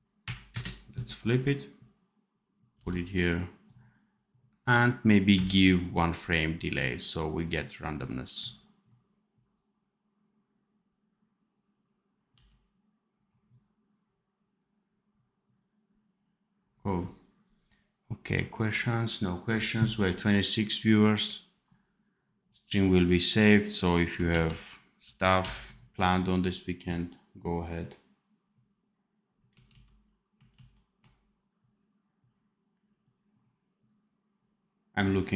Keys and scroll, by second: 2.7 v, 12.2 d, 24.3 ctrl+s, 24.9 ctrl+b, 29.6 ctrl+z, 30.5 ctrl+shift+z.